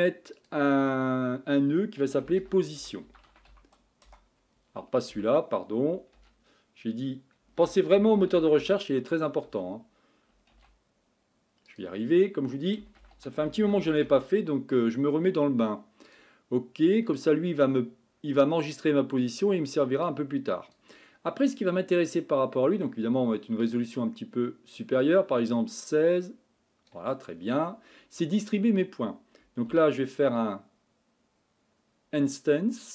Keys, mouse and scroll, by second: 7.6 shift+a, 20.0-32.9 drag.